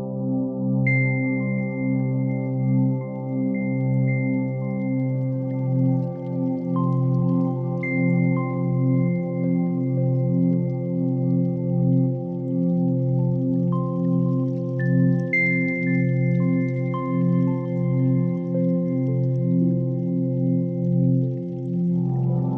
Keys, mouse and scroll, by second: 0.4 shift+a, 4.1 ctrl+3, 4.8 middle click, 5.3-5.6 scroll up 4, 5.6 shift+a, 6.8 s, 7.5 g, 11.4 click, 12.1-14.4 drag, 15.4 click, 16.4 scroll up 5, 16.9 shift+middle click, 17.7 shift+a.